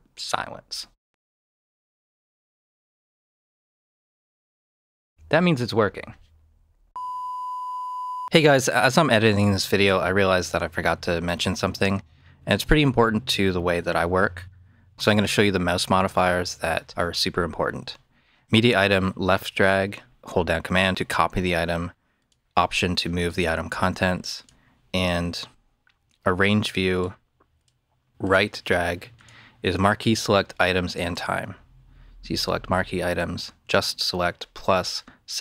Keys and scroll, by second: 0.8 space, 4.1 space.